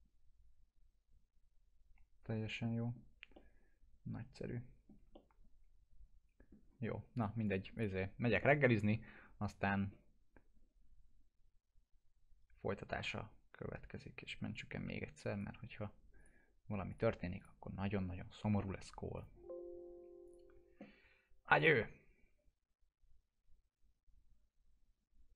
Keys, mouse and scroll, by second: 3.3-4.9 alt+middle drag, 5.1-6.7 middle drag, 7.1 click, 14.5 click.